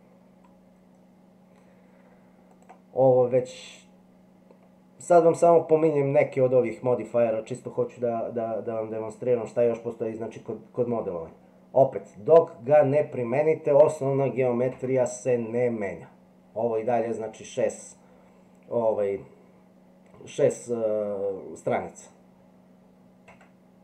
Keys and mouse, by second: 14.7 Tab, 23.3 Tab.